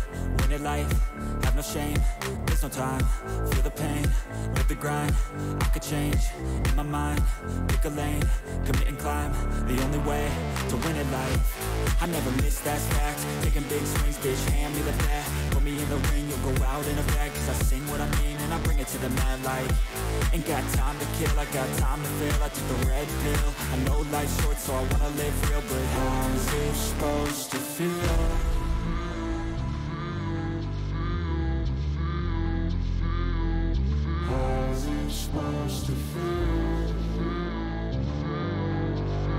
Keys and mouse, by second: 0.0 click, 1.0 click, 4.3 click, 6.1 click, 6.6 click, 7.2 click, 9.7 click, 10.3 click, 11.7 shift+click, 11.8 shift+click, 15.1 click, 17.3 click, 21.3-22.5 drag, 25.7-27.4 drag, 32.3-34.0 drag, 35.7 click, 36.8 click, 37.2 click.